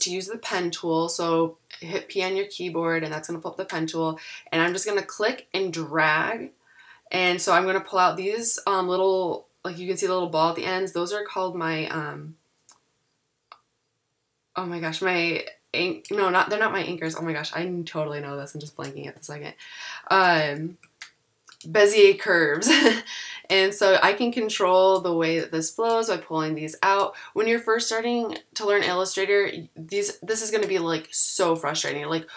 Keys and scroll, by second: 0.6 p, 20.3 super+=, 20.7 a.